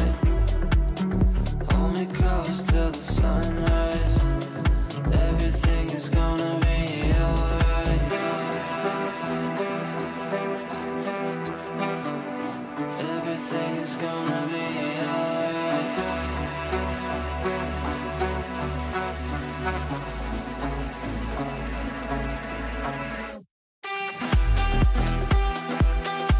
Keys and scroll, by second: 7.0 ctrl+z.